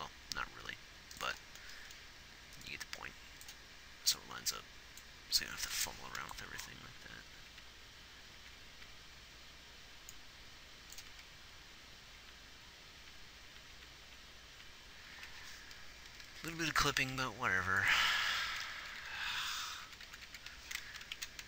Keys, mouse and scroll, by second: 6.9 Left, 7.2 Left, 8.1 Right, 8.9 Right, 9.1 Right, 11.5 Left, 12.0 Left, 12.7 Right, 13.4-14.4 Right, 14.9 Right, 15.6 Right, 16.6 g, 17.4 r, 19.2-20.7 Left.